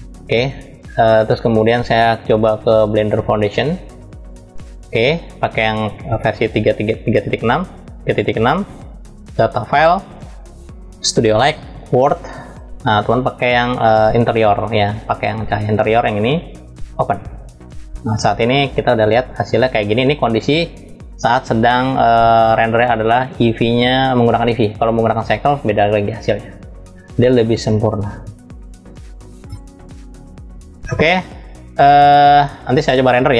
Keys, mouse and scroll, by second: 21.7 click, 24.4-26.1 drag, 31.0 click.